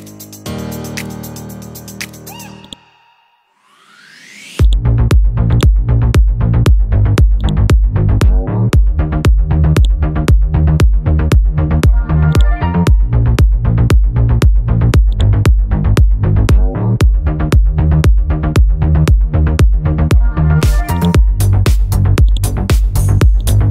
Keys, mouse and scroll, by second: 2.6 click, 3.2-4.6 scroll up 1, 4.6 click, 7.2 click, 7.4 right click, 9.8 click, 10.4-11.1 scroll down 1, 11.1-12.3 scroll up 1, 12.3 click, 17.3-17.8 scroll down 1, 17.8-18.9 scroll up 1, 20.9-23.7 drag.